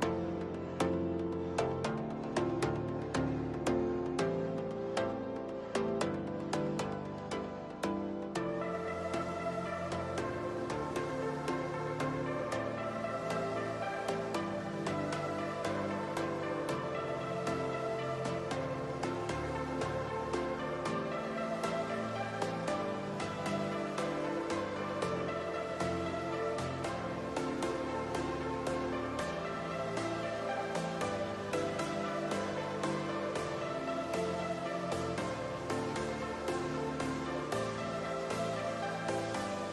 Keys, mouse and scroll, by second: 0.0 click, 0.5-1.7 middle drag, 1.7 click, 2.0 scroll down 3, 2.0-2.4 middle drag, 2.4 scroll up 3, 2.8 shift+middle click, 3.7 click, 4.1 scroll down 2, 4.3-4.8 middle drag, 4.8-5.3 scroll up 4, 5.3-6.8 middle drag, 7.1 KP_0, 8.0 n, 9.8 click, 10.4 n, 10.7-11.0 scroll up 8, 11.2-11.6 shift+middle drag, 11.6 scroll up 1, 11.8 shift+middle click, 12.2 scroll down 2, 12.5-14.0 shift+middle drag, 14.0 scroll up 1, 15.1 n, 15.9 drag, 16.5 n, 16.8 middle click, 17.2-19.4 scroll up 2, 20.5 click, 21.1 scroll down 4, 21.8 g, 22.3 click, 23.9 middle drag, 24.1-24.6 scroll up 1, 24.6 click, 24.8-25.6 scroll up 2, 25.0 shift+middle click, 25.6 KP_1, 26.5 click, 27.8-28.1 middle drag, 28.1-28.5 scroll up 2, 28.5 KP_0, 29.3 click, 29.7 s, 30.1 click, 31.2 click, 31.7 KP_0, 32.0 n, 34.2 click, 35.5 click, 36.0-36.5 middle drag, 36.6 scroll up 2, 37.3-39.7 shift+middle drag.